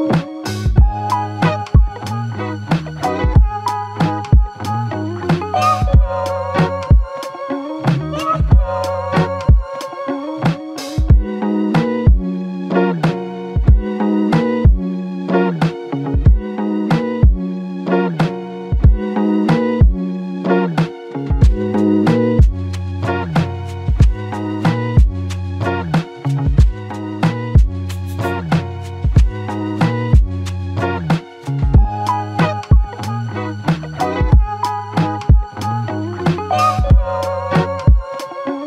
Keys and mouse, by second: 6.8 alt+click.